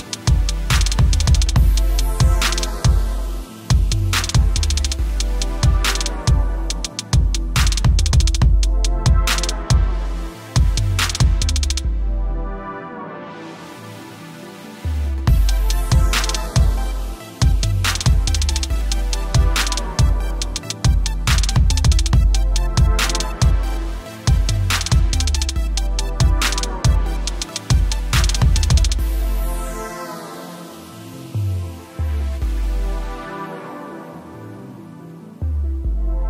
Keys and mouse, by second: 16.5 click, 21.4 click, 28.1 click, 29.7 click, 34.5 click.